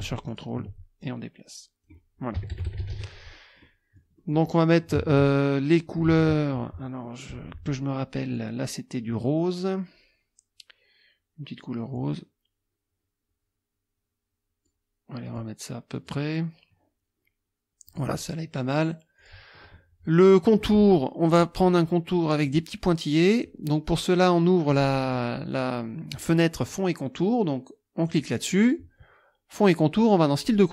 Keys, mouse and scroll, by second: 0.3 ctrl+click, 1.0 ctrl+click, 2.4 KP_Subtract, 3.6 click, 5.1 alt+Tab, 6.1 alt+Tab, 7.1 click, 8.4 click, 12.0-14.8 drag, 15.2 click, 16.0 click, 17.9 click, 19.2 click, 22.5 click, 24.7 click, 25.5 click, 28.1 click, 30.4 click.